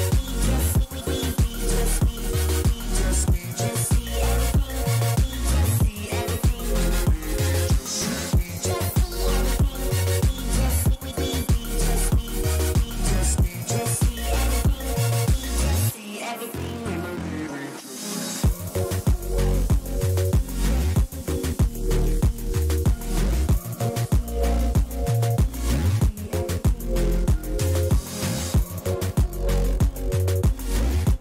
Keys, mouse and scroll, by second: 6.0-8.5 middle drag, 9.7-12.9 middle drag, 13.7-15.2 middle drag, 15.2-17.5 drag, 19.0-20.8 middle drag, 21.8 a, 22.7-27.1 middle drag, 27.1-28.9 drag, 27.7 a, 28.0 a, 28.3-31.2 middle drag, 28.9 right click.